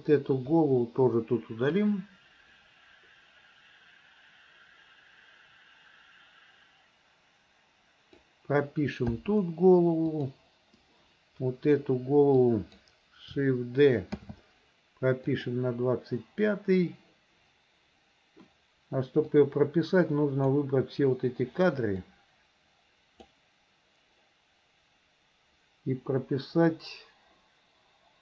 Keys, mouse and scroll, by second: 0.5 Delete, 1.8-8.3 drag, 9.2 i, 10.2 click, 12.4 click, 14.2 shift+d, 19.3-20.6 drag, 22.0-23.4 drag.